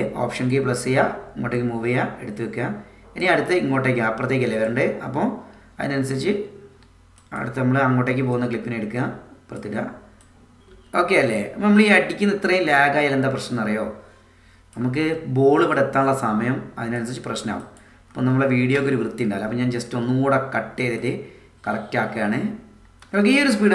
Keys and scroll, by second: 10.6 space, 18.8 BackSpace, 23.0 space.